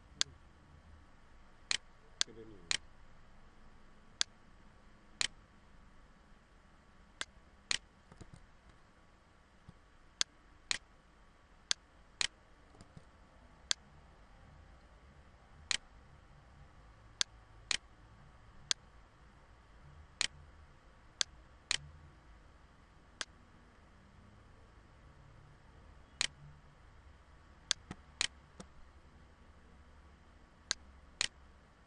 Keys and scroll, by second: 2.6 ctrl+z, 7.8 ctrl+z, 9.8 ctrl+z, 12.4 ctrl+z, 13.4 ctrl+z.